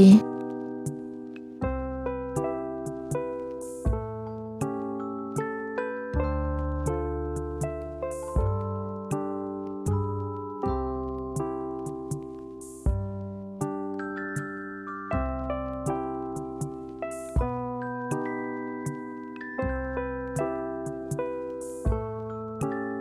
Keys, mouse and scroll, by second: 0.4 r, 8.1 shift+d, 10.0 r, 11.8 g, 15.2 shift+d, 16.9 r, 19.9 click, 21.2 click, 22.0 click, 22.6 click.